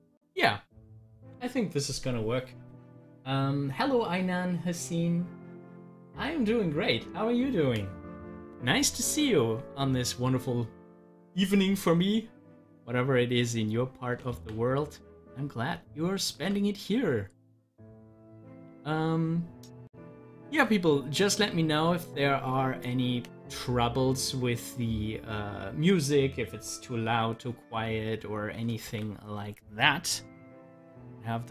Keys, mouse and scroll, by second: 12.9-14.3 drag, 14.3 ctrl+z, 16.5 ctrl+z, 18.5 ctrl+z, 20.5 ctrl+z, 28.0 click, 28.8 ctrl+z.